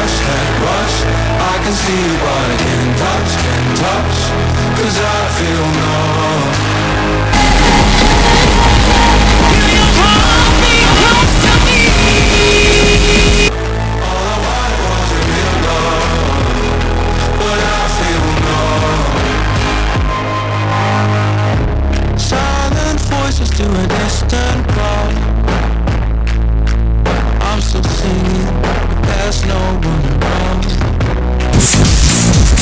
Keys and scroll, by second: 14.0 Page_Down.